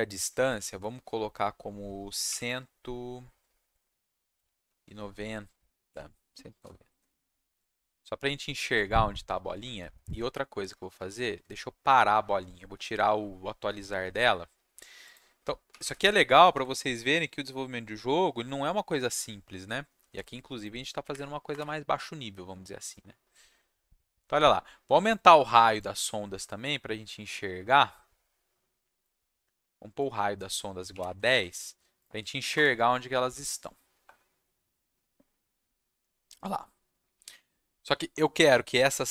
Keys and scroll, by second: 6.5 BackSpace, 7.7 ctrl+s, 16.4 ctrl+s, 21.0 Up, 21.5 Return, 31.3 ctrl+s, 32.4 ctrl+Up, 32.5 ctrl+Return.